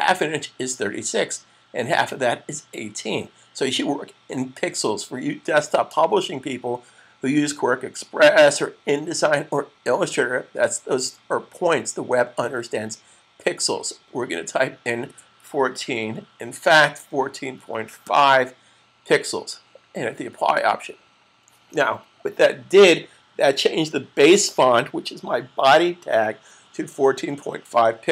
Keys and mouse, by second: 14.8 typing, 19.5-20.2 typing, 20.6 click.